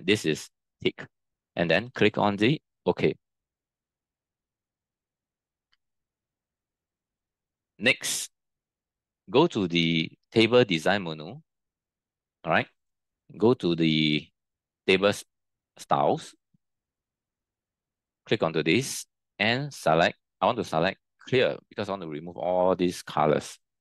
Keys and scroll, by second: 4.5 ctrl+t.